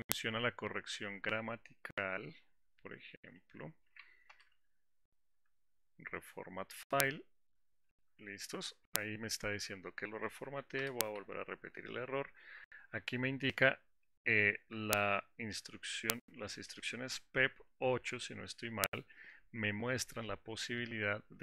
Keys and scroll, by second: 4.9 alt+Return.